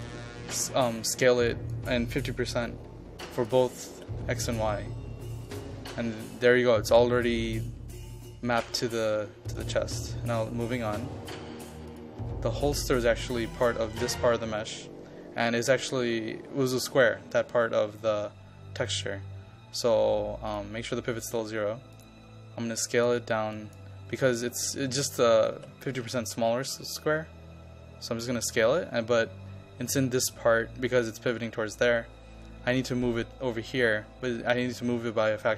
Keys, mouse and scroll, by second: 2.3-4.0 typing, 3.3 click, 5.5 click, 23.9-25.8 typing, 25.0 click, 28.3-35.5 drag.